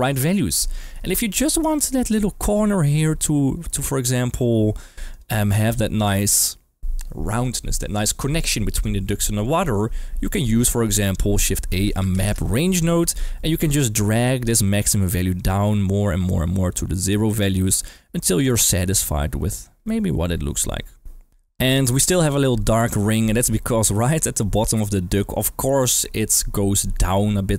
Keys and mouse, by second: 1.3 middle drag, 1.8 shift+middle click, 2.8 d, 3.6 middle click, 10.7 shift+a, 14.4-19.5 shift+drag, 19.8-21.3 middle drag, 21.7 middle click, 22.9 shift+middle drag, 23.2-24.2 middle drag, 26.8-27.5 d.